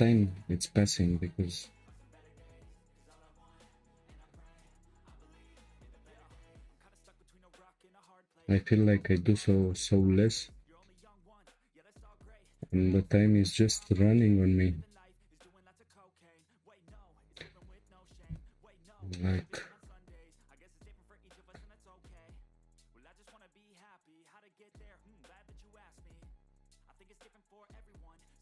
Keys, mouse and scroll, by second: 1.8 Tab, 2.3 click, 2.6 Tab, 4.2 1, 4.4 click, 6.3 click, 7.0 g, 8.0 click, 8.3 g, 9.6 click, 9.9 g, 11.5 Tab, 11.8-12.1 scroll down 1, 12.1-13.4 shift+middle drag, 13.4-13.8 scroll up 1, 13.8-14.7 shift+middle drag, 14.7-16.3 scroll up 2, 16.3-17.0 scroll up 1, 17.0-17.8 scroll up 1, 18.6 Tab, 19.1-20.7 shift+middle drag, 20.7 ctrl+r, 24.6 click, 25.8-27.9 drag, 27.9 g.